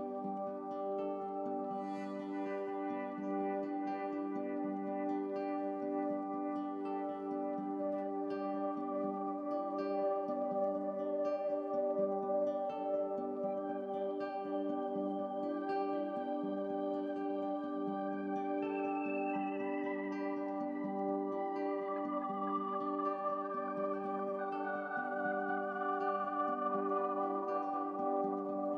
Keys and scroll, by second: 2.2 x, 7.3 ctrl+z, 27.1 ctrl+z, 27.1 x.